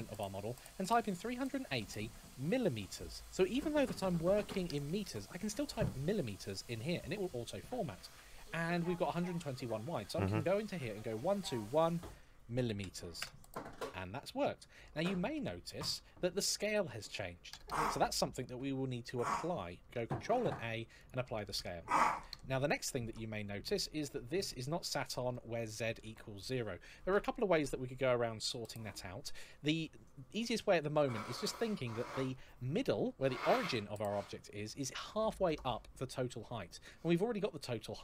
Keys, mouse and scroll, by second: 0.6 KP_3, 1.0 KP_8, 1.5 KP_0, 2.3 m, 9.8 click, 11.1 KP_1, 11.2 KP_2, 11.5 KP_1, 12.3 m, 15.7-16.5 scroll up 1, 19.7 ctrl+a, 22.8-24.1 scroll up 1, 24.2 ctrl+middle click, 25.0 shift+middle click, 25.1 shift+middle click.